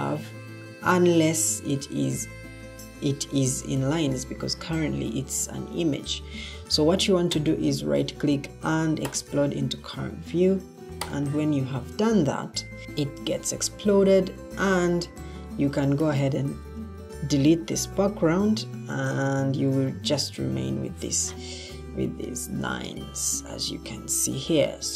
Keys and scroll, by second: 13.3 Escape, 17.9 Delete.